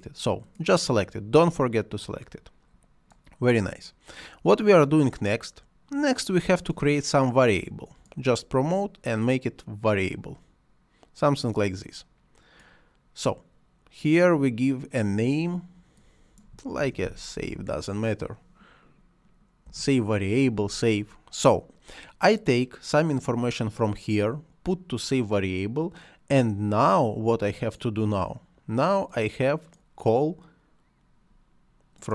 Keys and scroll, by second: 16.5-17.9 typing, 19.5 Return.